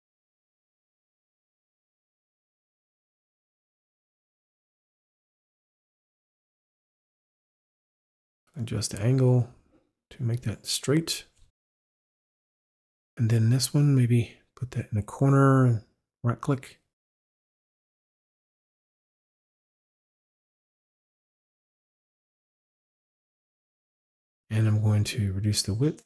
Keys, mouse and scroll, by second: 5.9 click, 7.3 click, 8.5 click, 10.6 click, 13.3 click, 14.5 right click, 15.7 click, 16.4 click, 17.5 click, 18.0 click, 18.9 click, 20.6 click, 21.8 click, 22.4 click, 23.4 click, 24.7 click.